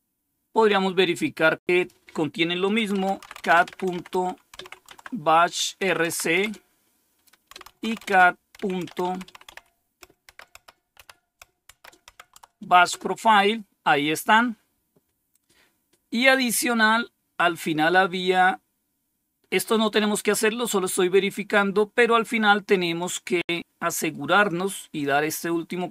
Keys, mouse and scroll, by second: 1.7 click, 2.6-12.8 typing, 12.3 Tab, 15.4-16.0 scroll down 1, 16.1-17.7 scroll down 4, 18.3-18.7 scroll down 1, 22.9-25.0 drag, 25.7 right click.